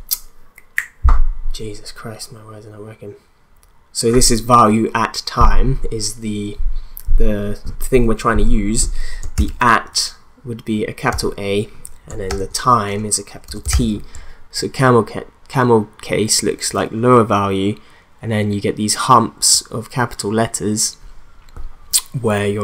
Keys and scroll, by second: 9.3 shift+a, 11.1 t, 12.3 shift+t, 13.4-14.2 typing.